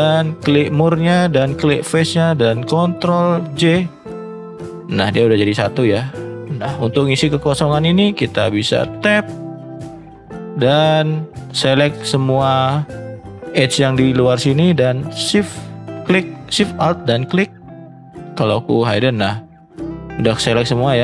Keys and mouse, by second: 1.3 shift+click, 4.3 ctrl+j, 5.1 middle click, 5.9 shift+middle click, 6.3 middle drag, 6.9 shift+middle click, 8.9 Tab, 14.9 alt+shift+click, 18.2-18.6 drag, 19.7 middle click, 20.3 shift+middle click.